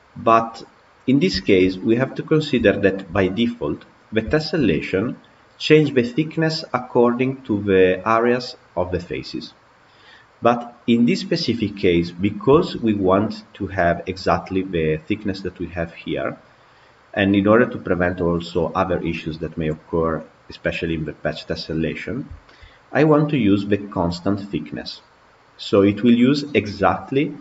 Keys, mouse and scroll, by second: 1.2-1.6 shift+middle drag, 1.6-2.0 scroll down 3, 2.0-3.3 middle drag, 3.3-4.2 scroll up 2, 4.2-4.5 shift+middle drag, 4.5-5.8 scroll up 4, 5.8-8.8 scroll down 1, 11.9-12.4 scroll down 3, 12.4-15.4 shift+middle drag, 19.7-21.2 scroll up 3, 21.6-22.2 scroll down 4, 22.2-25.2 shift+middle drag.